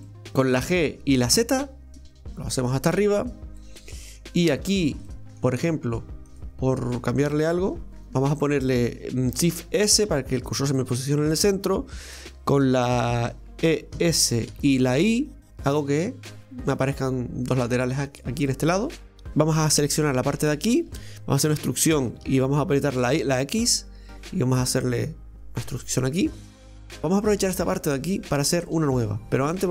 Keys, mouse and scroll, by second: 0.0 middle click, 0.3 shift+right click, 0.7 g, 3.6-4.7 middle drag, 4.7 right click, 5.1-6.3 middle drag, 6.3 click, 7.0 right click, 8.0 shift+right click, 9.5 shift+s, 18.5 middle click, 19.1 a, 19.9 right click, 20.2 alt+shift+right click, 20.4 alt+shift+right click, 21.4 e, 26.3-26.7 scroll up 1, 26.7-29.7 middle drag.